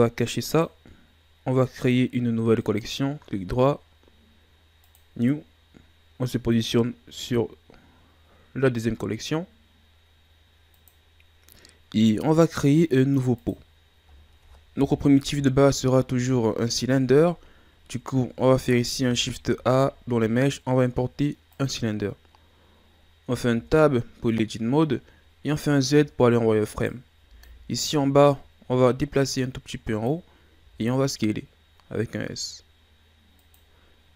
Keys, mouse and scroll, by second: 0.5 click, 1.8 click, 2.6 right click, 4.9-5.6 right drag, 6.5 click, 13.4 click, 14.1-15.2 shift+scroll down 2, 15.2 KP_1, 18.0 ctrl+scroll down 2, 19.4 shift+a, 23.5 Tab, 25.4 z, 26.7 right click, 27.3 b, 29.2-30.6 drag, 30.6 s.